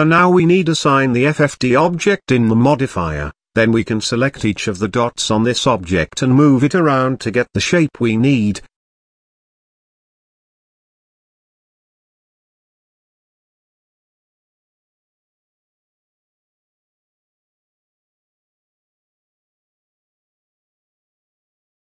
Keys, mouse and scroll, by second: 0.7 click, 1.6-4.0 drag, 4.5 Tab, 5.7 click, 6.3 shift+click, 6.9 shift+click, 8.0 g, 12.4-13.7 shift+middle drag, 13.7 g, 15.0 click, 16.4 shift+click, 17.1 g, 20.1-21.1 middle drag, 21.1 click.